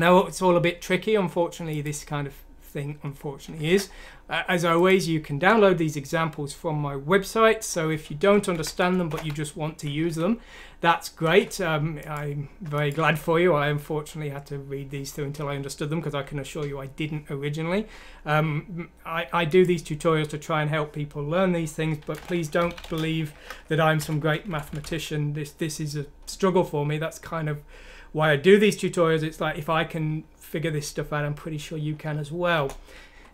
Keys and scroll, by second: 3.6 alt+f, 8.5 shift+End, 8.8 shift+Left, 9.1-10.0 typing, 10.0 F9, 11.2 Return, 21.8-24.8 typing, 32.5 Return.